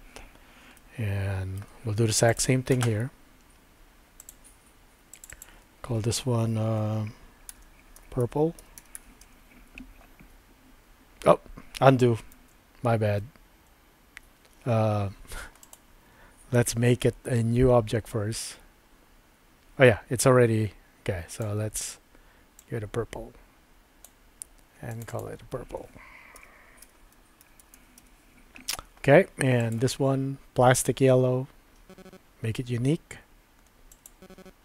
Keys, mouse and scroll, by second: 0.8 shift+middle click, 4.3 click, 5.1 click, 5.3-10.1 drag, 12.9 super+z, 13.3 super+z, 15.6 click, 24.9 click, 25.1-29.0 drag, 29.6 click, 33.9 click.